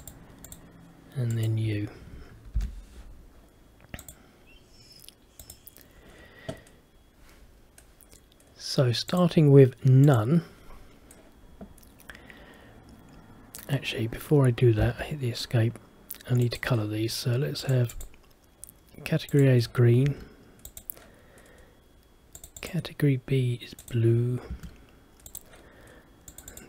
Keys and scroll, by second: 2.7 shift+u, 14.9 Escape, 20.2 Escape, 24.6 Escape.